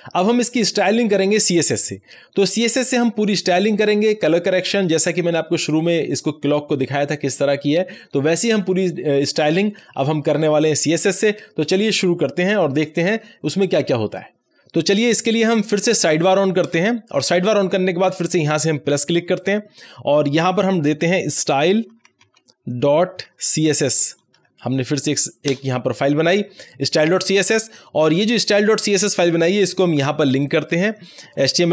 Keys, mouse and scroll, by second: 16.7 scroll up 1, 16.7 click, 19.4 click, 19.4 click, 21.4-24.7 typing, 25.5 Return, 30.5 Return, 30.5 click.